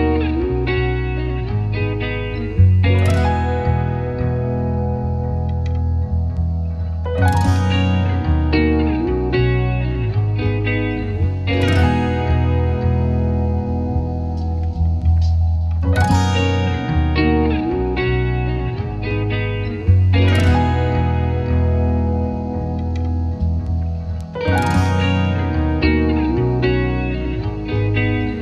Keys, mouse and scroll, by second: 0.1 click, 0.7 ctrl+click, 1.0 click, 1.3 click, 1.8 shift+middle click, 1.9 click, 2.1 g, 2.1 l, 2.3 ctrl+click, 2.8 shift+middle click, 2.9 ctrl+click, 3.4 shift+middle click, 3.5 ctrl+click, 3.9 click, 4.2 ctrl+z, 4.3 shift+middle click, 4.4 click, 4.5 shift+middle click, 4.8 shift+middle click, 4.9 shift+middle click, 5.1 click, 5.6 shift+middle click, 5.7 click, 5.8 shift+middle click, 5.9 Tab, 5.9 ctrl+z, 6.1 ctrl+click, 6.1 ctrl+z, 6.3 shift+middle click, 6.3 ctrl+click, 6.5 shift+middle click, 6.9 shift+middle click, 6.9 ctrl+click, 7.1 ctrl+middle click, 7.3 shift+middle click, 7.5 Tab, 7.5 ctrl+middle click, 7.5 click, 7.7 Down, 7.7 click, 8.0-9.1 drag, 9.7 click, 10.6 click, 11.6-15.2 drag, 15.2 x, 15.7 Tab, 15.9 click, 16.4 s, 17.4 scroll up 2, 17.5 Tab, 17.7 g, 18.3 s, 18.8 s, 19.3 click, 19.6 click, 19.8 Tab, 20.0 click, 20.9 click, 21.1 click, 22.1 scroll down 2, 22.4 Tab, 22.9 click, 23.0-24.3 shift+middle drag, 24.3-28.4 drag.